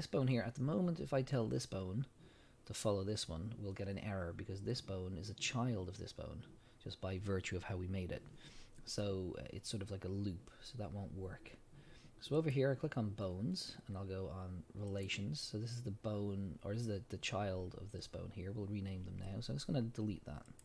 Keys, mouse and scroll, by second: 14.9 click, 20.5 click.